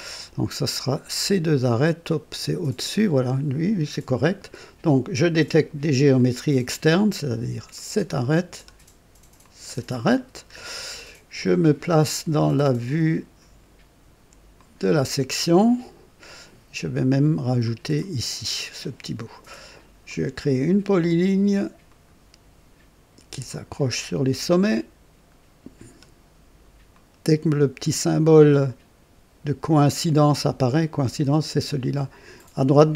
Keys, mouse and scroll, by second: 6.1 click, 7.7 click, 9.3 click, 10.1 scroll up 1, 10.9 right click, 14.5 click, 17.6 click, 20.0 click, 21.8 click, 23.4 click, 26.8 click, 29.7 click.